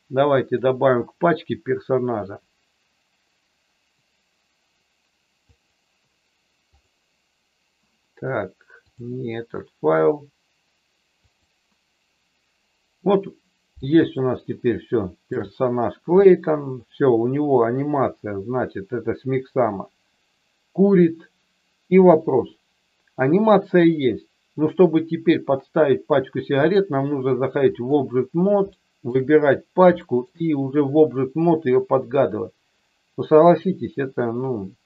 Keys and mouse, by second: 0.5-7.0 drag, 8.9-11.9 drag, 14.1 shift+middle click, 18.1-22.0 drag, 26.8-28.0 drag, 28.7 shift+middle click, 29.9 shift+middle click.